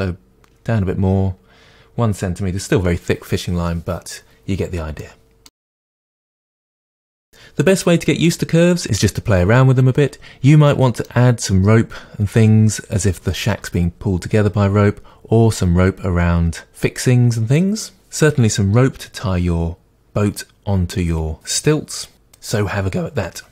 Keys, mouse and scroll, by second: 5.0-23.5 middle drag, 5.6 scroll down 1.